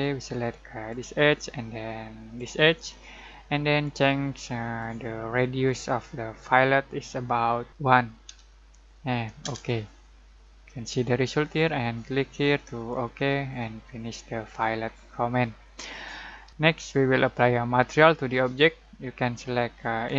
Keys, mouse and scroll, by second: 4.8-7.7 drag, 8.2 1, 9.4 Return, 12.4-14.0 drag, 14.0-14.4 scroll down 1, 14.4-16.5 scroll up 1, 16.5 click, 20.0-20.1 drag.